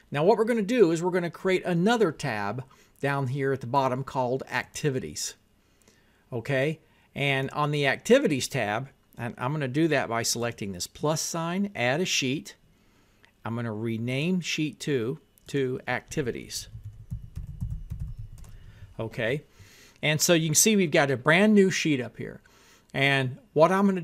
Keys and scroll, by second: 16.6-18.9 typing.